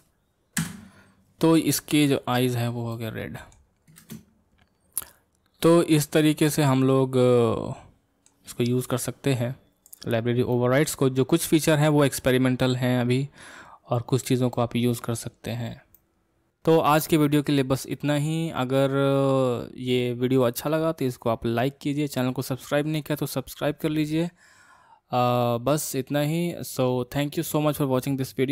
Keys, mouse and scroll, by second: 2.1 click, 2.5-2.9 scroll down 4, 2.9-4.0 middle drag, 4.0 space, 5.7-8.7 middle drag, 9.9-10.5 drag, 10.5-12.1 middle drag, 12.1-12.6 scroll up 3, 12.6-15.4 middle drag, 15.4-15.9 scroll down 2, 15.9-16.5 middle drag.